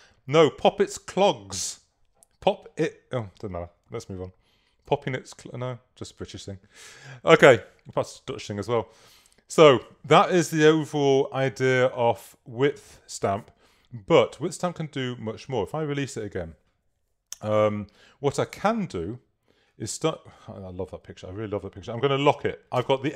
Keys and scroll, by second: 4.9 v, 22.9 i.